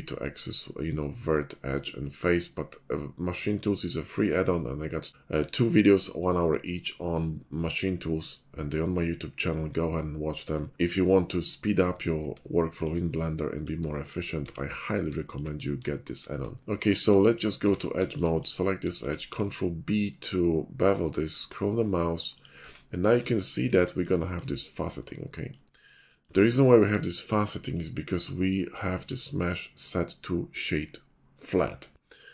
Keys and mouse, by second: 14.4 Tab, 15.1 shift+middle click, 15.7 Tab, 17.6 Tab, 18.4 middle click, 19.3 ctrl+b, 19.4 middle click, 22.6 Tab, 25.2-25.6 middle drag, 26.4 middle drag, 27.1 middle click, 29.1 shift+middle click, 29.3 middle drag.